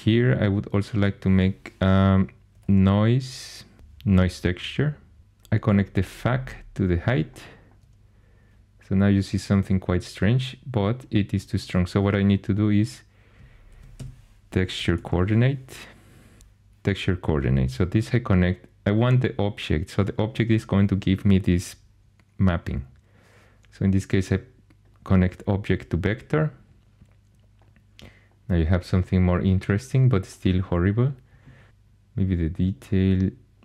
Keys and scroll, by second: 1.3-4.3 typing, 13.7-16.9 typing, 31.7 Return.